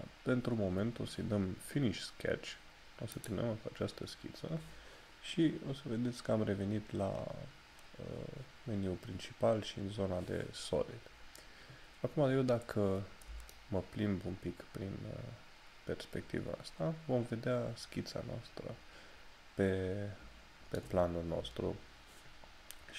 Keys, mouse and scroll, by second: 3.6 click, 13.6 shift+middle click.